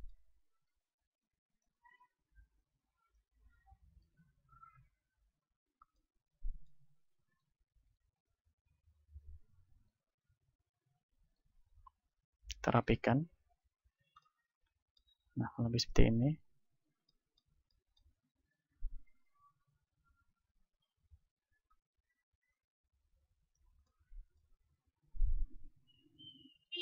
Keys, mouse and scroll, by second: 0.4-3.7 right drag, 3.7 middle click, 4.0 ctrl+z, 4.6 ctrl+z, 5.1 ctrl+z, 5.6-7.2 middle drag, 7.2-11.4 drag, 7.2-11.4 right drag, 13.9 click, 13.9 right click, 14.5 middle click, 15.8-17.0 right drag, 19.4-20.8 right drag, 21.0 middle click, 21.2 KP_7, 21.8 middle click, 22.4-24.1 drag, 23.8 right click, 24.1-26.0 middle drag, 26.0-26.8 right drag.